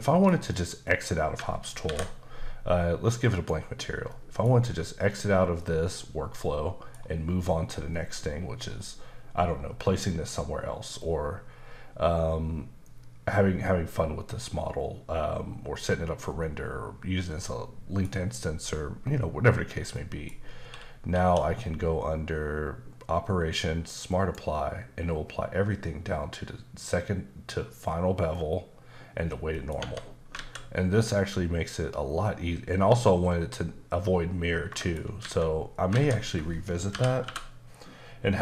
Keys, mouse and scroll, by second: 0.0 shift+middle click, 1.9 alt+m, 3.2 click, 4.1 middle click, 5.6 middle click, 11.0 middle click, 19.9 middle click, 21.2 q, 24.1 click, 29.5 middle click, 29.8 Tab, 30.4 alt+a, 31.0-33.1 scroll up 1, 33.7-34.5 scroll down 1, 35.0 middle click, 35.2 a, 37.2 typing.